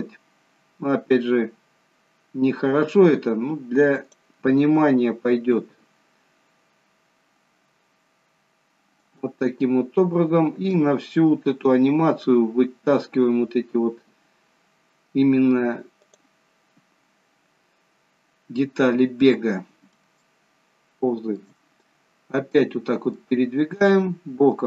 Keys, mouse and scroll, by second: 5.6 shift+d, 10.9 shift+d, 19.0 scroll up 2, 20.3 shift+middle click, 20.3 shift+scroll up 1, 21.9-22.4 scroll up 4, 22.7 middle click, 23.6-24.6 scroll down 1.